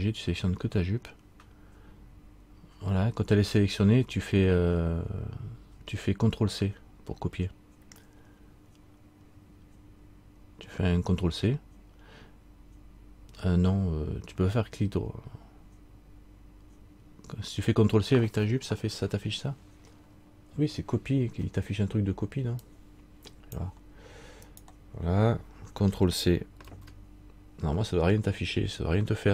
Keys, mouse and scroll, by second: 24.6 right click, 26.8 ctrl+c.